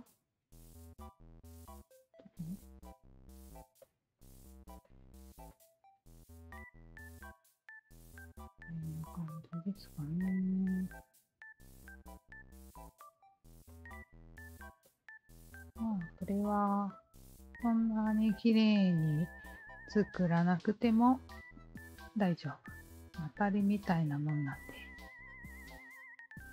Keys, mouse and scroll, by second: 0.9 r, 1.5 click, 2.2-3.5 alt+drag, 3.8 alt+click, 4.2 alt+click, 4.8 alt+click, 5.5 shift+click, 6.1 shift+click, 6.8 shift+click, 8.0 shift+click, 9.2-11.7 alt+shift+drag, 12.4 shift+click, 13.6 alt+click, 14.8 alt+click, 15.0 Tab, 15.5 alt+middle click, 15.9 click, 16.1-17.2 alt+drag, 17.4 alt+middle drag, 17.7-18.9 alt+drag, 19.1 alt+middle drag, 19.7 alt+click, 22.5 alt+click, 23.4 alt+click, 24.6 alt+click, 25.1 alt+click, 25.7 w.